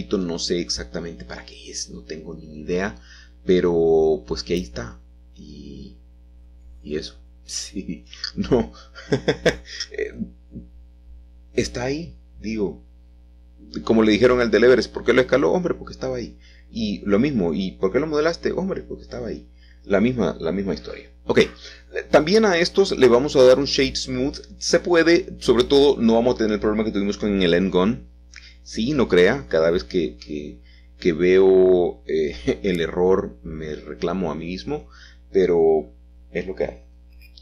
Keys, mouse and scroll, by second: 0.0 a, 0.1 a, 5.9 alt+shift+click, 6.9 a, 7.1 a, 9.2-10.3 alt+shift+middle drag, 10.9 typing, 13.4 middle click, 15.2 s, 15.4 s, 16.1 Escape, 16.3 Escape, 17.0 a, 17.1 a, 19.4 alt+shift+click, 20.4 s, 22.6 click, 23.7-24.7 scroll down 1, 25.0 middle click, 25.1 click, 26.2-27.5 shift+middle drag, 27.5 click, 28.6 click, 29.9-30.9 scroll down 2, 30.9-32.4 shift+middle drag, 33.8 shift+middle click, 34.5 click, 36.4 shift+click.